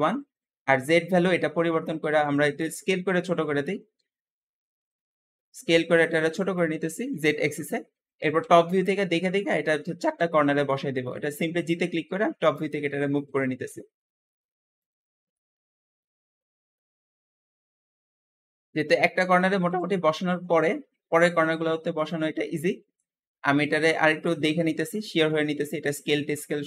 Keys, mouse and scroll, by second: 2.0 s, 8.2 KP_7, 8.9-9.5 scroll up 2, 9.5-9.9 shift+middle drag, 9.9 g, 12.6 scroll up 5, 13.0 shift+middle click, 13.4-13.9 scroll up 2, 13.9 g, 14.9 scroll down 1, 15.2-17.7 middle drag, 17.7-18.1 scroll down 2, 18.1 shift+middle click, 18.9-19.5 scroll up 1, 19.5 KP_7, 20.1-20.9 scroll up 2, 20.9 g, 22.3 middle click, 23.1-23.5 scroll down 1, 23.5-25.4 shift+middle drag, 25.4 s.